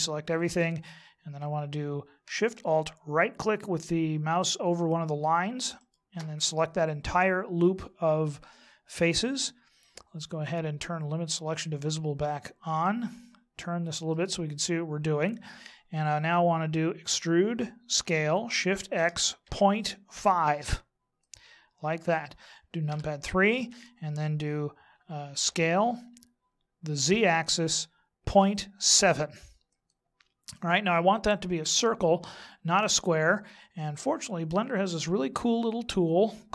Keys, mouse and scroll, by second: 5.8 alt+shift+right click, 11.7 click, 12.8 middle click, 17.9 e, 22.8 KP_3, 25.4 s, 33.6-36.5 scroll down 16.